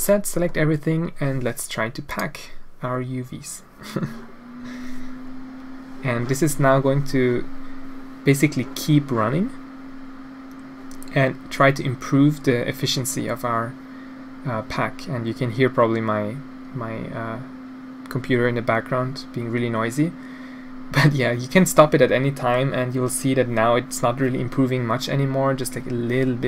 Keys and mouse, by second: 2.3-9.0 drag.